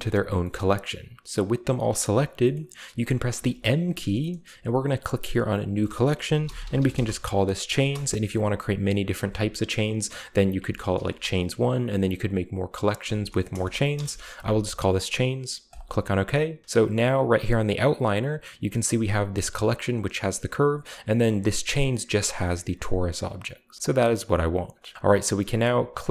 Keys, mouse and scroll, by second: 0.5-2.4 middle drag, 2.5-3.3 middle drag, 3.3 m, 5.6 click, 6.3-7.8 typing, 10.9 1, 12.9 BackSpace, 13.5 BackSpace, 13.9 Return, 15.6 click, 17.2 click, 18.6 click, 19.6 click, 20.7-21.6 drag, 23.3-23.7 drag, 23.8-24.9 drag, 24.9-26.1 scroll down 1.